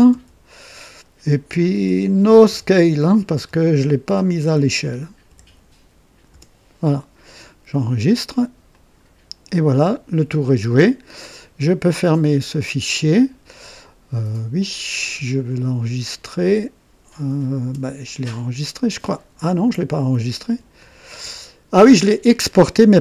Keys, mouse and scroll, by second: 0.0-0.1 typing, 1.5-8.0 typing, 8.7 click, 12.5 click, 16.4 Escape.